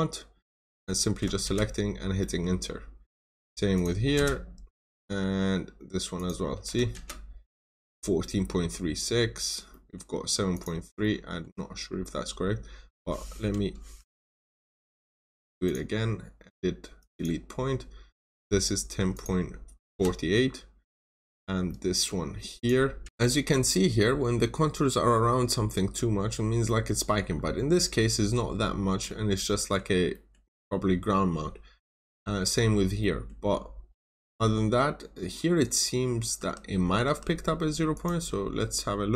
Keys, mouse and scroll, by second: 0.6 click, 1.4 Return, 2.0 scroll down 1, 2.1 middle click, 2.6 scroll up 1, 3.7 click, 4.1 Return, 4.6 scroll down 1, 4.7 middle click, 6.1 click, 6.8 click, 6.9 Return, 7.5 scroll up 1, 8.1 middle click, 9.2 scroll up 1, 9.6 middle click, 10.4 click, 10.8 scroll down 1, 11.0 middle click, 11.8 scroll up 1, 12.7-13.0 scroll down 1, 13.9 Escape, 15.6 click, 18.1 scroll up 1, 19.0 click, 19.8 Return, 20.4 scroll down 1, 21.0 scroll up 1, 21.6 middle click, 22.5 click, 23.1 middle click, 23.5 scroll up 1, 26.4-26.9 scroll down 2, 26.6 middle click, 27.4 scroll up 1, 28.0 scroll down 1, 28.4-29.0 scroll up 1, 29.2 scroll down 1, 29.5 middle click, 29.8 scroll down 1, 30.0 middle click, 30.5-31.2 scroll up 1, 32.2 scroll down 1, 32.9 middle click, 33.6 scroll up 1, 34.0 middle click, 34.6-35.0 scroll up 1, 36.3 Escape, 37.0 Escape, 37.8 click.